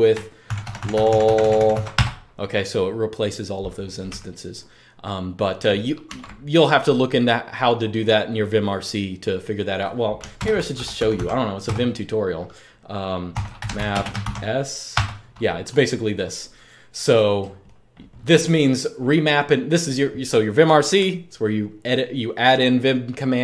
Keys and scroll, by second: 0.0-2.0 typing, 5.8 super+q, 10.1 super+Return, 10.2-11.4 typing, 12.8-14.6 typing.